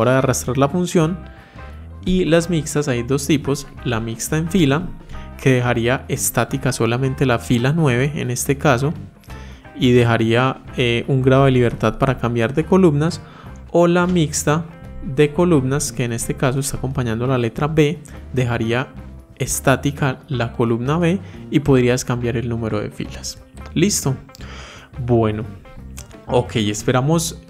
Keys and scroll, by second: 2.9 F4, 14.4 F4.